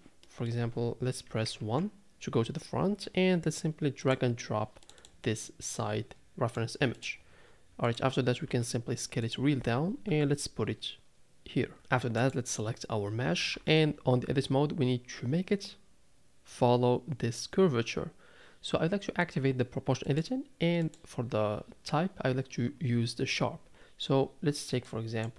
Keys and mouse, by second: 0.2 middle click, 1.6 KP_1, 8.5 s, 9.9 g, 10.8 s, 12.2 click, 13.5 Tab, 20.0 click, 20.8-23.7 drag.